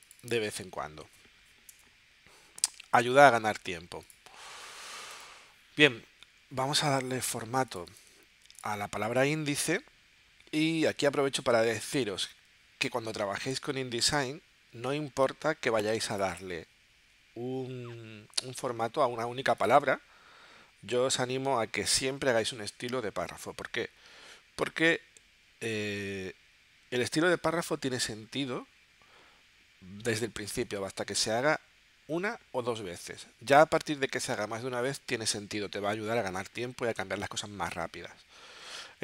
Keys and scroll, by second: 1.8 BackSpace.